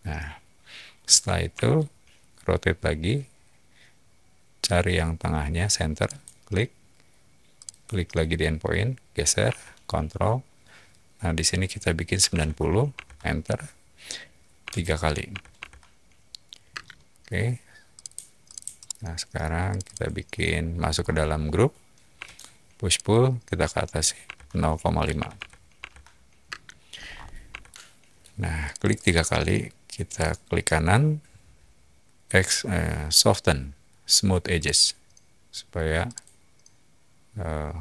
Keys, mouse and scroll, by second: 1.5 q, 6.0 click, 7.5 click, 7.7-8.7 typing, 11.9-12.8 typing, 12.9 Return, 14.0-15.3 typing, 15.5 Return, 16.6 space, 17.9 click, 18.4 click, 18.7-19.3 middle drag, 19.7 click, 19.8 click, 20.8 scroll up 2, 22.1 p, 22.8 click, 24.2-26.4 typing, 26.9 middle click, 26.9 scroll up 1, 27.0 scroll, 27.5-28.1 shift+middle drag, 28.6 click, 28.8 click, 28.9 click, 30.1 right click, 34.5 click, 36.0 click.